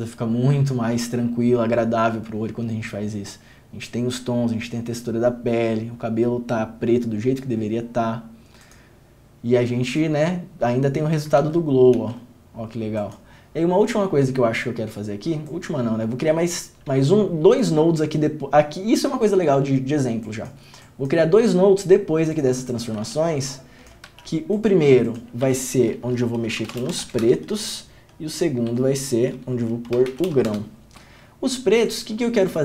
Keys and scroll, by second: 11.6 ctrl+d, 12.1 ctrl+d, 23.2 alt+s, 24.3 alt+s, 25.6 Tab, 26.8 r, 27.0 t, 27.2 s, 27.4 Return, 28.9 Tab, 30.1 g, 30.1 r, 30.6 Return.